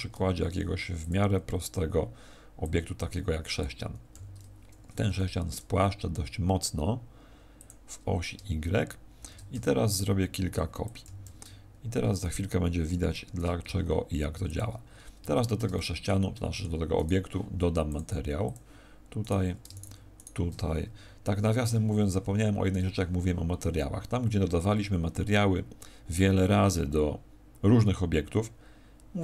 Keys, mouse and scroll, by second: 2.5 click, 4.0 s, 7.6 click, 9.1 shift+d, 10.9 click, 11.2 shift+s, 13.2 shift+d, 14.5 click, 14.8-15.3 scroll up 2, 15.3 shift+middle click, 15.6 middle click, 16.4 middle click, 16.9 right click, 17.8 click, 19.2 right click, 19.6 shift+right click.